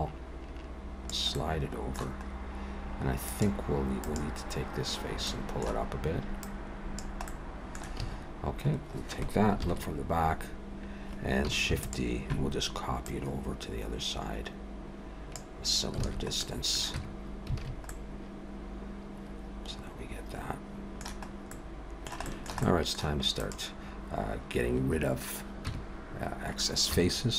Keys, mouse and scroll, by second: 1.3 middle click, 2.3-3.3 scroll up 2, 3.3 click, 4.0 click, 5.3 middle click, 6.4 click, 7.3 middle click, 8.0 a, 9.6 ctrl+KP_1, 11.7 shift+d, 13.0 click, 16.0 alt+a, 16.4 middle click, 16.9 Tab, 17.6 alt+a, 17.9 middle click, 21.3 scroll up 1, 21.5 middle click, 22.2 shift+middle click, 22.6 middle click, 23.4 click, 25.6 Tab, 26.9 z.